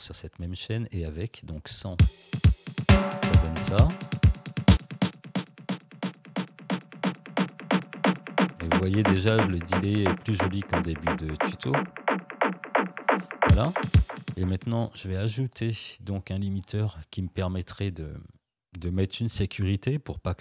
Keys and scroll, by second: 2.0 space, 4.7 space, 13.5 space.